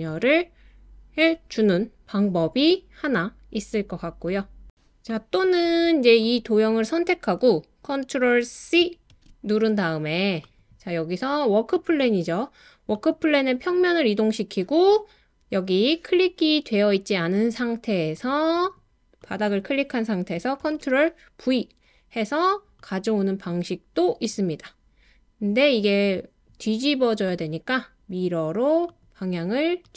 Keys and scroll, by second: 9.1 super+c, 20.6 super+v.